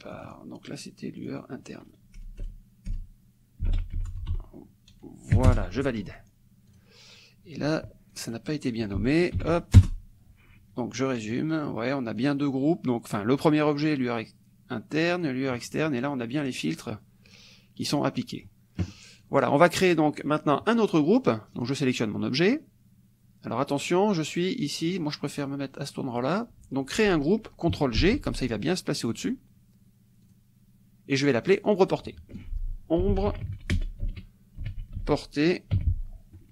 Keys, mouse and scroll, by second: 0.2 click, 1.2 click, 2.2 BackSpace, 3.7 i, 4.0 t, 5.5 Return, 6.7 click, 8.1 click, 9.4 ctrl+v, 9.8 ctrl+Return, 11.3 click, 12.2-13.8 drag, 15.2 click, 17.3 click, 17.8 click, 18.2 middle click, 19.2 click, 21.6 click, 25.3 click, 28.0 ctrl+g, 29.1 click, 30.2-32.3 drag, 32.8-35.8 typing.